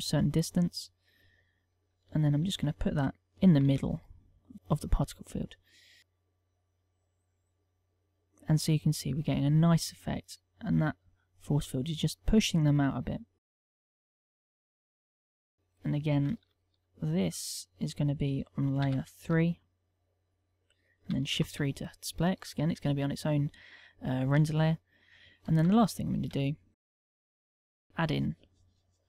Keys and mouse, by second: 0.8 middle click, 1.9 ctrl+middle click, 2.1 shift+middle click, 3.4 g, 4.4 click, 4.5 middle click, 5.9 KP_0, 10.5 middle click, 13.6 click, 14.7 click, 15.3 middle click, 16.2 shift+middle click, 16.9 click, 18.5 m, 21.2 shift+3, 22.2 shift+middle click, 23.0 middle click, 23.9 shift+middle click, 25.2 KP_1, 25.7 shift+middle click, 26.4 right click, 27.5 shift+a.